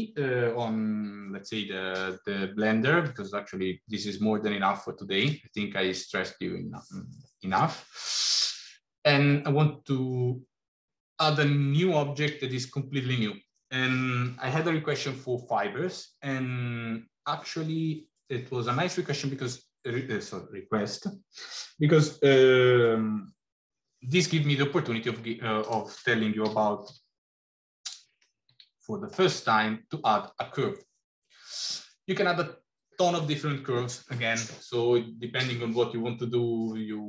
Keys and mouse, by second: 25.5 click, 26.3 g, 29.3 shift+a.